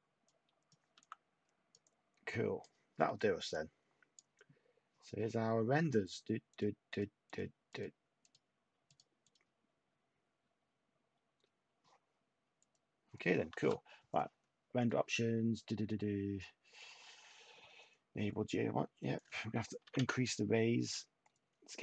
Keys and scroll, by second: 0.6-1.4 typing, 19.8 8, 19.9 Tab.